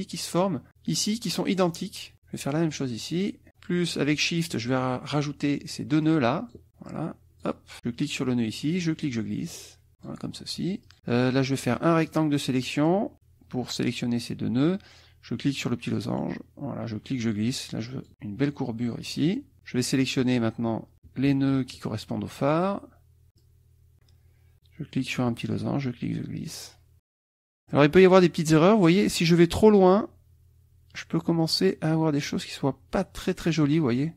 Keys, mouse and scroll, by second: 2.5 click, 4.4 shift+click, 6.1 shift+click, 6.9 shift+click, 8.8-10.3 drag, 10.8 click, 12.1-13.1 drag, 15.5-18.1 drag, 20.0-21.1 drag, 21.8-22.9 shift+drag, 23.4 shift+click, 25.3-26.9 drag, 27.1 click, 31.4-33.8 drag.